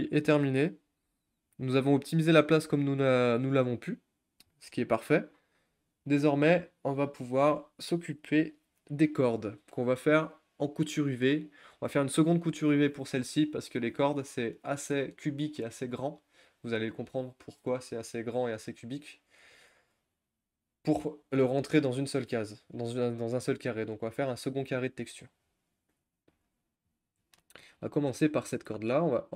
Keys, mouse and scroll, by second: 26.2 click, 26.5 shift+middle drag, 26.8-27.3 shift+scroll up 3, 27.3-27.7 shift+middle drag, 27.7 shift+scroll up 1, 27.9 click, 28.4 click, 28.7 scroll up 3, 29.0-29.3 scroll down 1.